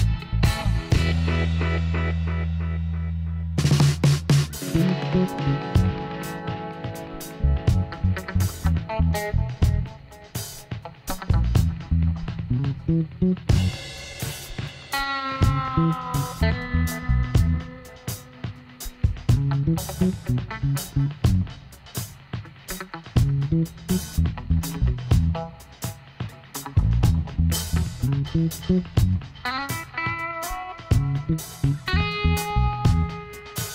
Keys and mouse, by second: 0.8 r, 2.4-4.1 drag, 3.8 e, 6.3 g, 9.6-10.7 drag, 10.0 e, 12.1 e, 14.8-15.9 right drag, 14.8 g, 17.0-20.3 right drag, 17.4 g, 18.8 g, 20.8-23.1 middle drag, 24.7-25.8 middle drag, 25.8 right click, 25.9 middle click, 26.6 e, 27.3 click, 29.0 s, 31.5 r, 33.0 s.